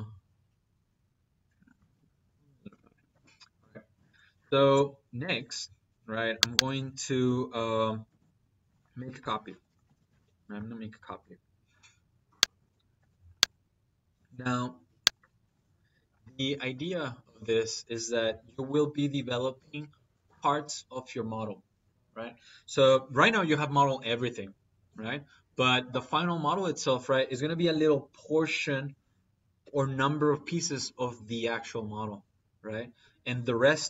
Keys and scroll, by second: 1.6 Escape, 9.3 c, 9.8 p, 10.0 y, 10.1 space, 12.8 space.